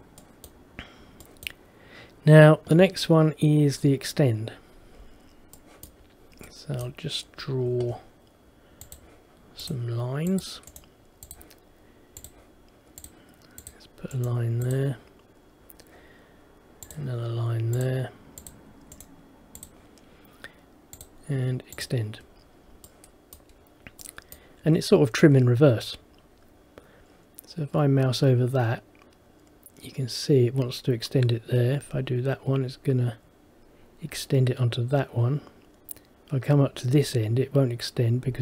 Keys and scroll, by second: 7.8 Escape.